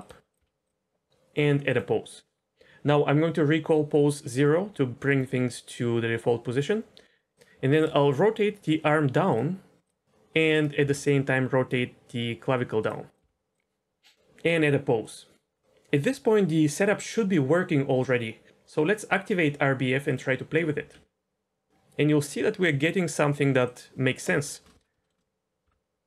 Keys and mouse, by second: 0.3 click, 0.5 r, 1.6 click, 4.2 click, 7.3 r, 7.8 r, 9.3 click, 10.0 r, 10.7 r, 13.2 r, 15.0 click, 20.0 click, 20.8 r, 25.0 shift+middle drag, 25.6 r.